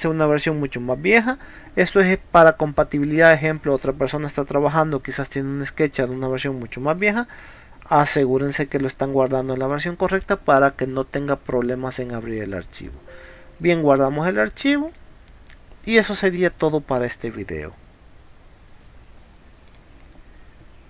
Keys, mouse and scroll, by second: 2.4 click, 7.0 click, 9.6 click, 11.3-11.6 drag, 12.8 click, 14.1 click, 14.9 click, 19.7 click.